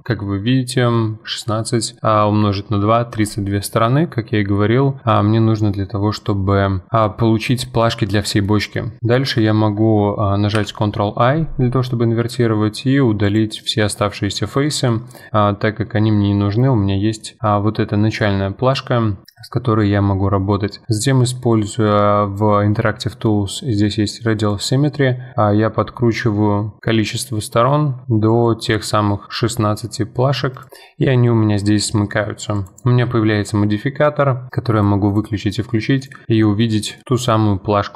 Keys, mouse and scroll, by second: 0.0-2.6 middle drag, 8.4-10.6 middle drag, 10.6 ctrl+i, 12.2 x, 14.0 middle click, 14.7 Tab, 15.1-19.2 middle drag, 24.5-26.8 drag, 30.8-32.5 middle drag, 32.5 click, 34.7 click, 35.1 click, 36.0 click, 36.3-36.8 middle drag, 36.8 scroll up 1, 37.0-37.9 middle drag.